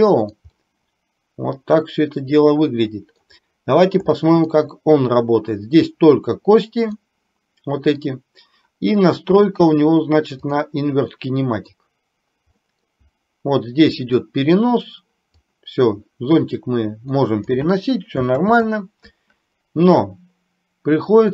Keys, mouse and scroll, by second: 0.6-3.2 middle drag, 4.2 shift+middle click, 7.1-8.1 middle drag, 9.6-10.7 drag, 11.2 middle click, 12.7 middle click, 14.1 click, 15.5-17.6 drag, 18.5 ctrl+z.